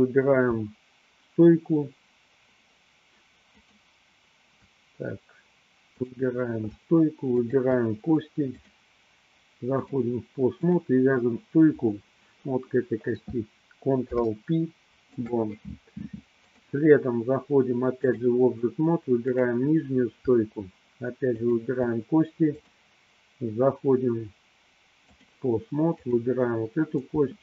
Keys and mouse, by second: 3.5 shift+click, 6.0 click, 8.8-10.0 drag, 10.8 click, 14.0 ctrl+p, 16.7-18.4 drag, 19.5 click, 21.3 shift+click, 22.9-25.5 drag, 26.2 click.